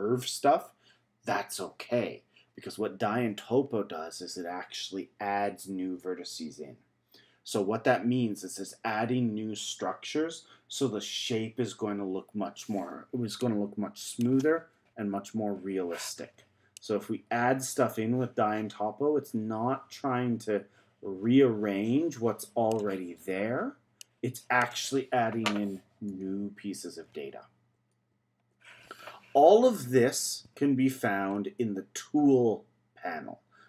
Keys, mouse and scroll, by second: 16.8-19.8 drag, 24.0-26.1 drag, 27.0 z, 28.0 z.